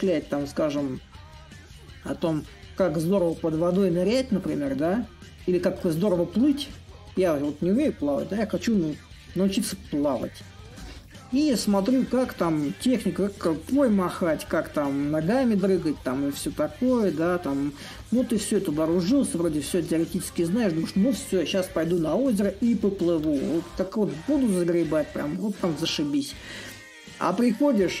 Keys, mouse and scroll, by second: 0.0-2.0 drag, 3.3 click, 9.4 a, 10.5-15.5 drag, 15.7-20.7 drag, 21.7-28.0 alt+drag.